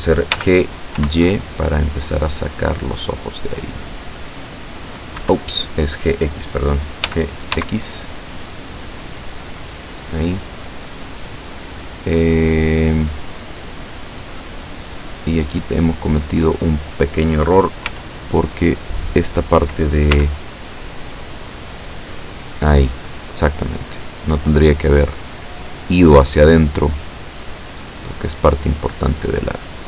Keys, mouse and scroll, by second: 0.4 g, 1.0 y, 5.2 Escape, 7.1 g, 7.6 x, 9.7 click, 10.2 scroll down 1, 10.6-11.8 middle drag, 11.9 scroll up 1, 12.4-14.5 middle drag, 14.9 right click, 15.5 right click, 15.9 right click, 17.9 z, 19.0 right click, 20.2 z, 21.7-24.8 drag, 24.8 scroll down 1, 25.2-26.6 middle drag, 26.8-28.7 middle drag, 28.9-29.8 middle drag.